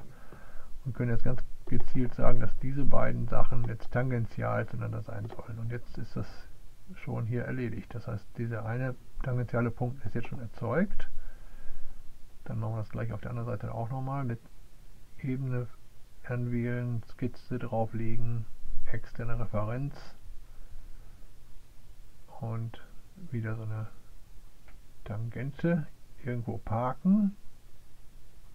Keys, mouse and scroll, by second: 0.2 click, 1.1 click, 4.8 click, 11.5 click, 14.4 click, 16.5 click, 17.4 click, 18.7 click, 21.5 right click, 24.8 click, 26.8 click, 27.3 right click, 28.3 click.